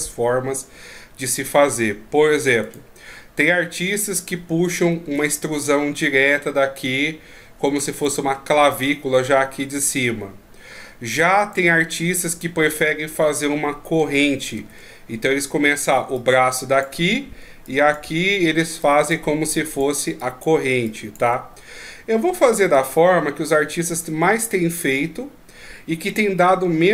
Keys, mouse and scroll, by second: 0.0 middle click, 2.6 right click, 5.0 e, 11.4 right click, 14.0 ctrl+z, 14.6 ctrl+z, 16.0-19.5 typing, 16.1 click, 17.6 click, 18.8 click, 19.5 click, 20.0 click, 20.2 click, 20.5 click, 20.6 click, 20.7 click, 20.8 click, 21.3 d, 22.6 d, 22.7 right click.